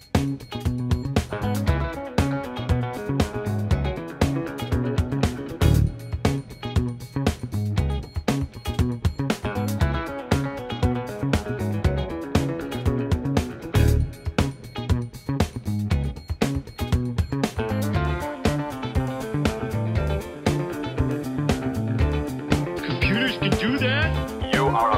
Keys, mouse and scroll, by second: 1.3 click, 3.3 Delete, 6.5-7.3 drag, 10.8 middle click, 12.1-13.4 drag, 14.8 drag, 15.3 drag, 15.8 click, 17.1-18.0 drag, 20.8 click, 21.3-24.3 middle drag, 22.2 Tab.